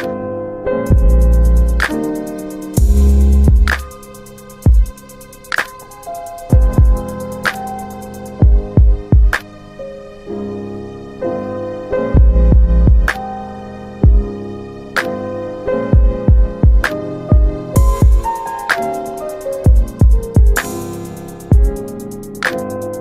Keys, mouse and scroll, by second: 2.1 click, 5.0 click, 7.1 alt+w, 7.5 alt+w, 8.2 alt+w, 8.9 middle click, 10.5 click, 12.1 alt+click, 14.0 alt+click, 16.5 click, 19.8 click, 21.8 middle click, 21.9 alt+middle click.